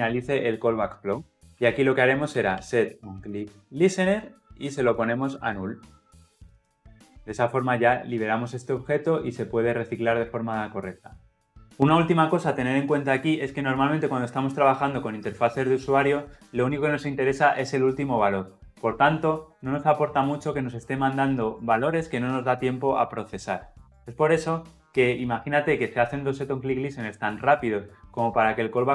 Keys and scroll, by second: 4.7 Return, 6.4 Escape, 6.5 ctrl+alt+l, 6.6 ctrl+alt+o.